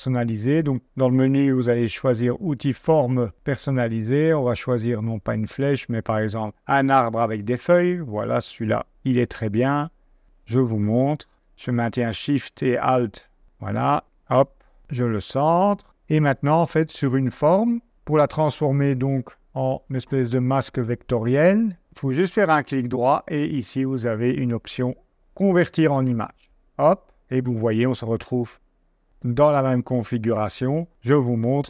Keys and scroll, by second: 15.8 super+d, 30.9 super+Tab.